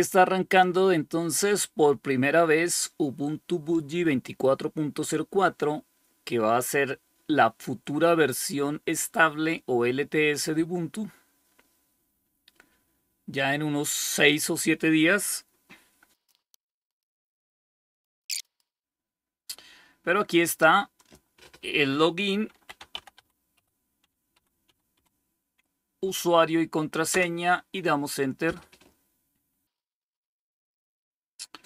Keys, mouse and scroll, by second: 20.8 click, 21.6 click, 22.1-25.3 typing, 26.9 Return.